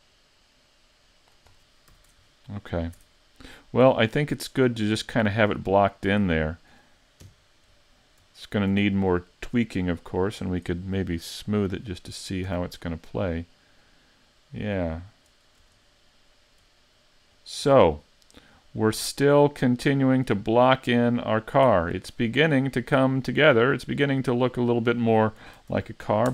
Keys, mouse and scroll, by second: 0.6 click, 1.5-1.9 scroll down 4, 1.9 a, 2.2-3.0 scroll down 1, 3.0 Tab, 3.0-3.8 scroll down 3, 3.8 a, 4.3 middle click, 5.8 shift+middle click, 6.3 middle click, 7.3 KP_5, 8.0-8.4 scroll down 3, 8.4 shift+middle click, 8.9 middle click, 10.3 right click, 11.6 click, 12.5 a, 13.0 middle click, 15.5 scroll up 3, 15.9 shift+middle click, 16.9-17.5 scroll down 4, 17.5 middle click, 18.7 shift+middle click, 19.8 middle click, 21.2-21.8 scroll up 1, 21.8 shift+middle click, 22.4 middle click, 23.1 shift+middle click, 23.7 middle click, 25.6 s.